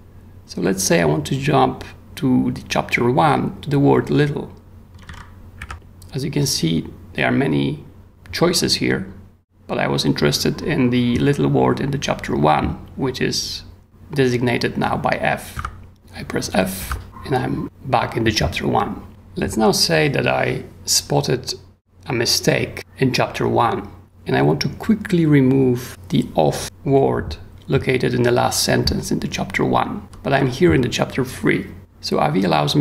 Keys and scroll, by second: 4.7-5.6 typing, 15.5 f, 16.8 f, 30.0 j, 30.3 k.